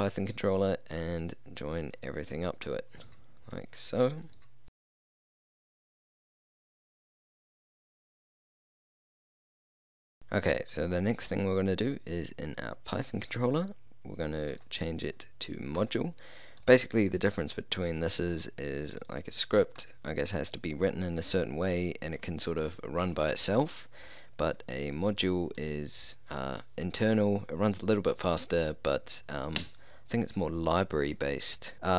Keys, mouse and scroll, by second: 1.2-5.5 drag, 6.0-8.7 drag.